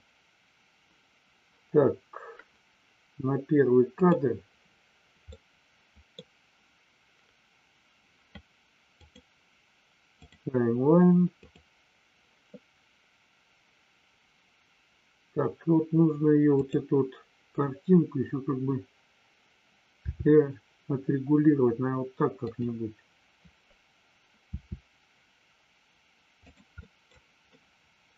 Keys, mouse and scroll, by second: 4.0 click, 5.2 middle click, 10.2 click, 11.5 click, 16.5 click, 22.4 click, 26.5 click, 26.7 middle click, 27.5-28.1 middle drag.